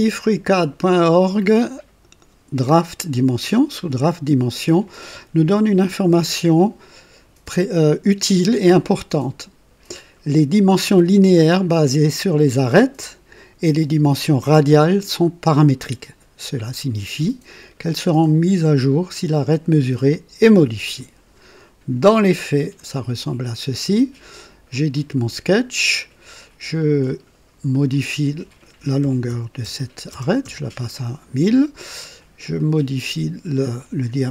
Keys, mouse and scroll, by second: 22.2 click, 24.6 click, 26.0 scroll down 1, 26.3 right click, 27.6 click, 28.9 KP_1, 29.2 KP_0, 29.5 KP_0, 30.0 KP_0, 30.3 KP_Enter, 32.7 click.